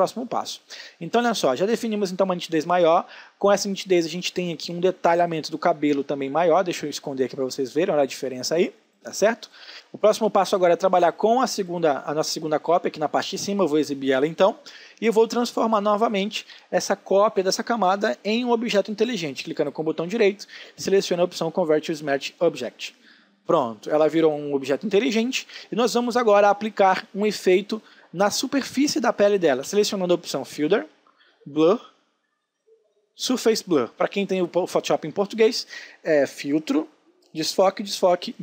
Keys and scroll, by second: 1.6 ctrl+space, 25.8 space.